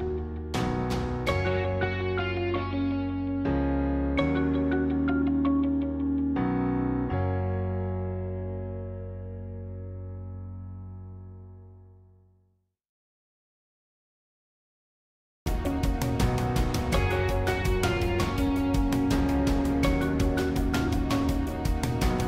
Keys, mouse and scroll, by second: 0.3-2.3 scroll down 1, 2.3-3.3 drag, 3.3-5.1 middle drag, 5.1 click, 5.6-7.5 middle drag, 7.5 g, 10.0 middle click, 10.6-11.8 scroll up 1, 11.8 scroll up 1, 11.8-13.0 middle drag, 13.0 click, 13.4-14.8 middle drag, 14.8 g, 18.8 g, 20.9-22.2 middle drag.